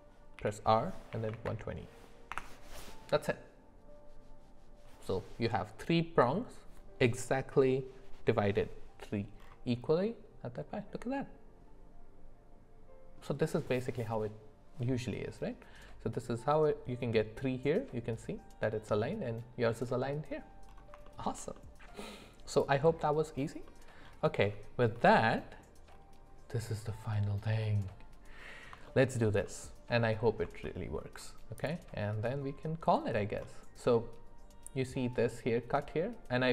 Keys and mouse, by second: 0.3 r, 9.9-13.2 middle drag, 21.0 shift+middle click, 21.5 middle click, 22.5 click, 23.7 middle click, 28.8 shift+middle click, 29.4 middle click, 30.6 shift+middle click.